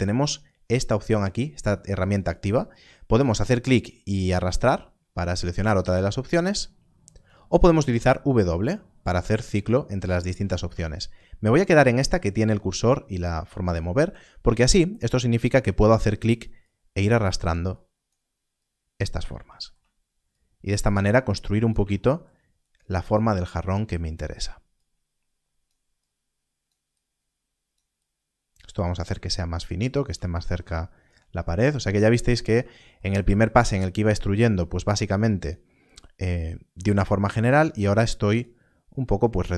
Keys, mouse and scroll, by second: 3.3 click, 8.0 w, 8.4 w, 9.9 w, 10.2 w, 10.4 w, 10.5 w, 15.1 w, 16.6 click, 20.3 click.